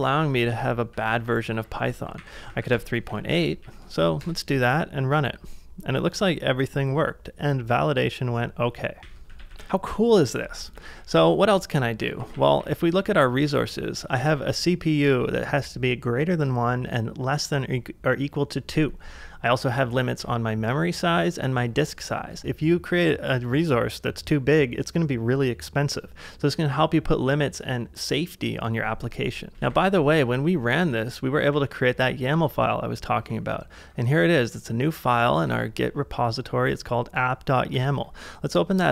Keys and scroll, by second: 0.0-3.3 typing, 3.1 ctrl+a, 3.6 Up, 4.2 Return, 9.0 ctrl+a, 9.0 k, 9.3 ctrl+a, 10.8 ctrl+a, 11.7-14.2 typing, 19.9 typing, 22.3 ctrl+c, 22.6 shift+v, 29.5-30.2 typing, 31.5-33.8 typing, 35.5 Return, 37.7 b.